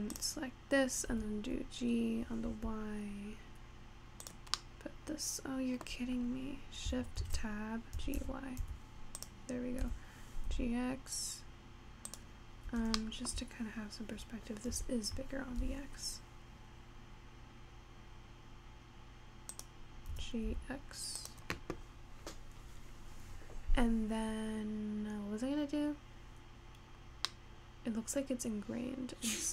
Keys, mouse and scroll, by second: 0.1 Tab, 0.2 click, 1.6 g, 4.6-7.2 middle drag, 7.2 shift+Tab, 8.0 g, 9.8 g, 12.6-13.0 scroll down 4, 13.0 shift+middle click, 13.5-14.4 scroll up 3, 14.7 s, 20.1 g, 25.5-27.4 scroll up 3, 27.4-29.5 middle drag.